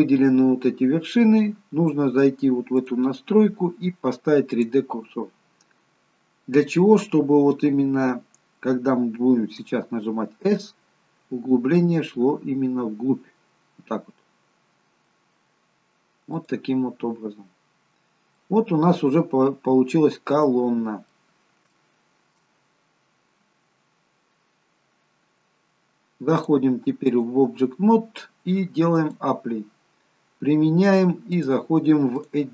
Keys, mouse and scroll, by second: 2.8 click, 6.0-6.4 scroll up 2, 17.8-18.4 scroll down 1, 18.4 middle click, 19.4-19.9 scroll down 2, 20.5 middle click, 20.5-21.4 scroll down 3, 21.8 shift+middle click, 22.6-24.9 scroll up 16, 26.4 click, 29.0 click.